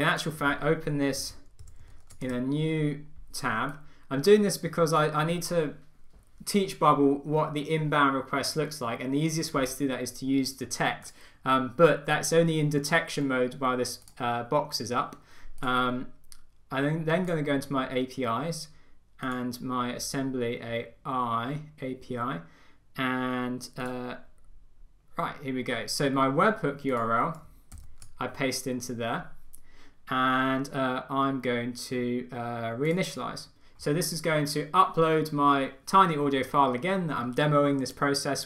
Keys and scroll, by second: 1.4 super+c, 1.9 super+t, 2.1 super+v, 2.5 Return, 28.0 super+v.